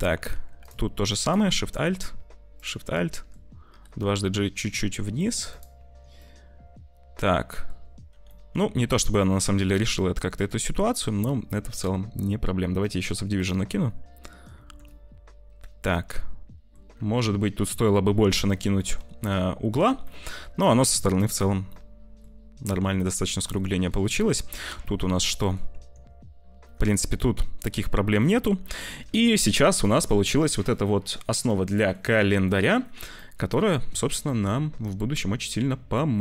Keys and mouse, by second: 0.2 2, 1.2 alt+shift+click, 1.5 middle click, 2.4 alt+shift+click, 2.8 middle click, 3.6 g, 5.7 Tab, 6.1-7.6 drag, 8.3 click, 8.7 t, 9.1 click, 10.0 click, 11.1 middle click, 14.3 click, 14.4 Tab, 14.8-16.6 drag, 16.9 Tab, 18.7 click, 19.6 middle click, 19.9 t, 19.9 middle click, 20.9 middle click, 21.5 middle click, 23.4 shift+middle click, 24.1 middle click, 24.9 Tab, 25.4 click, 25.6 Tab, 26.9 click, 28.1 click, 28.7 t, 29.0 ctrl+s, 29.7 click, 30.8 click, 31.6 click, 32.4 click, 33.0 click, 34.3 click, 34.7 middle click.